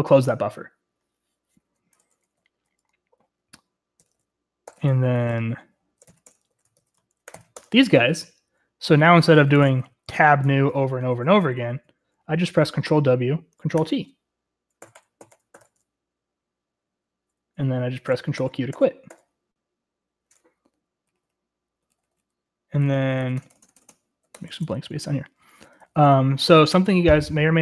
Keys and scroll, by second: 0.0 ctrl+q, 2.6 typing, 4.1-6.9 typing, 6.2 ctrl+r, 6.2 ctrl+l, 6.4 Return, 7.4 ctrl+r, 7.5 ctrl+l, 7.7 Return, 9.3-11.2 typing, 11.6 Escape, 13.0 ctrl+w, 13.0 :, 13.9 ctrl+t, 14.9 ctrl+w, 15.1 ctrl+t, 15.3 ctrl+w, 15.4 ctrl+t, 15.7 ctrl+t, 18.2 ctrl+q, 18.5 ctrl+q, 18.8 ctrl+q, 19.2 ctrl+q, 21.1-23.8 typing, 25.7-27.6 Return.